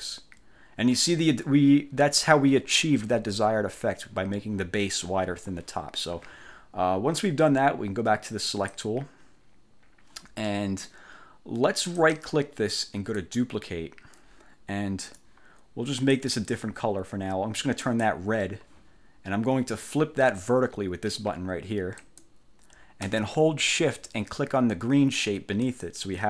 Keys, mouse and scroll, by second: 0.0 ctrl+scroll up 2, 8.6 click, 10.6 middle click, 12.1 click, 13.3 click, 15.3 click, 18.0 click, 22.1 click, 25.7 shift+click.